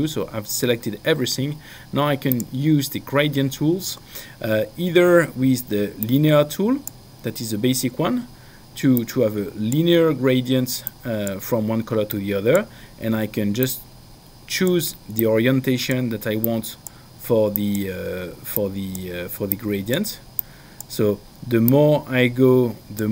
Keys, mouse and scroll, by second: 2.7 click, 6.0 click, 9.2 click, 11.2 click, 12.2 click, 13.6 click, 15.2 click, 16.4 click, 17.5 click, 21.6 click.